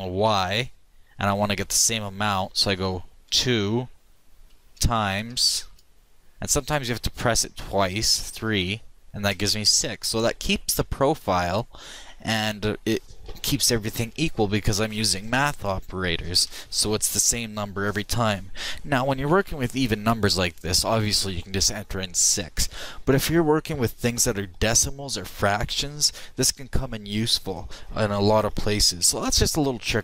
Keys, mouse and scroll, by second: 11.7-13.1 middle drag.